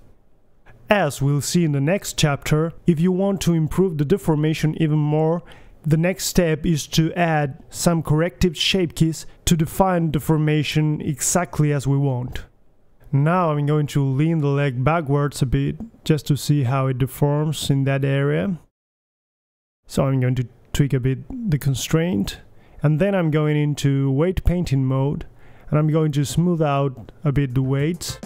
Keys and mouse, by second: 0.1 KP_3, 0.7 KP_3, 1.2 g, 3.5-5.9 middle drag, 5.9 a, 6.0 a, 6.2 alt+g, 6.4 alt+s, 6.4 a, 6.5-7.1 middle drag, 8.3 click, 9.5 ctrl+c, 10.2-11.2 right drag, 10.7 click, 11.2 click, 12.9-13.9 right drag, 14.1 middle click, 14.4 KP_3, 14.7 g, 15.1 g, 16.2-16.7 drag, 16.8 middle click, 17.0 KP_3, 17.7 g, 18.9-19.4 middle drag, 19.4 KP_3, 19.7 middle click, 19.9 click, 20.7 right click, 22.3-23.2 right drag, 23.4 right click, 24.5-25.4 middle drag, 25.7-26.7 drag, 26.0-26.3 right drag, 26.3 g, 26.8-27.3 drag, 27.2 g, 28.0 right click, 28.1-28.2 drag.